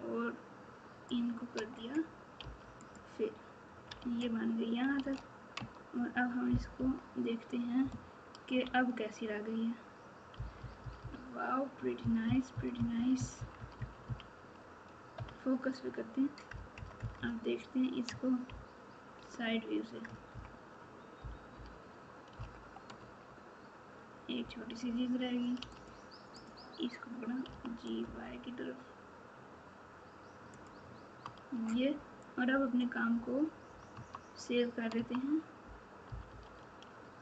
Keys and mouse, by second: 2.4 f, 2.8 click, 3.9 alt+z, 5.5 Tab, 6.7 KP_8, 7.8-8.5 KP_Subtract, 10.3-14.0 typing, 15.1 KP_Divide, 18.4 ctrl+KP_2, 20.0 KP_Add, 21.1 KP_4, 22.9 Tab, 25.6 2, 25.7 click, 27.5 g, 31.5 Tab, 36.0 KP_4.